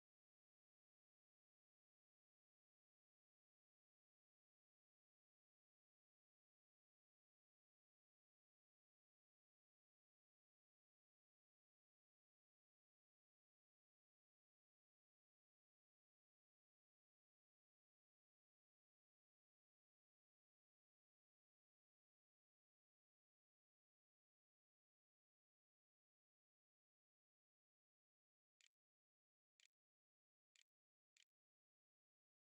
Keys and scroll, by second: 27.5-31.0 typing.